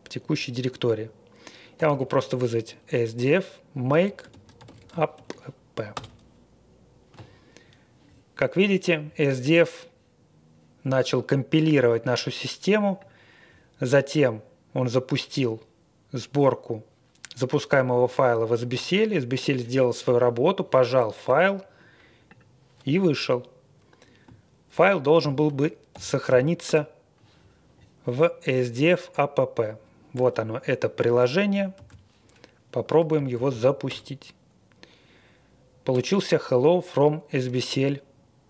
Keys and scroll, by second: 1.5-2.5 typing, 3.9-5.6 typing, 5.9 Return, 25.1 ctrl+l, 25.9-26.6 typing, 31.7 super+c, 32.9 typing, 33.4 super+v, 33.8 Return.